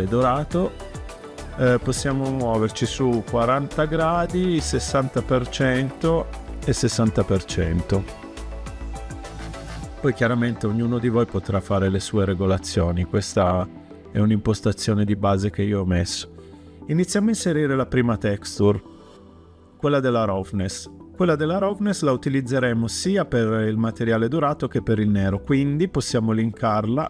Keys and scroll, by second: 3.2-4.0 typing, 5.8-7.4 typing.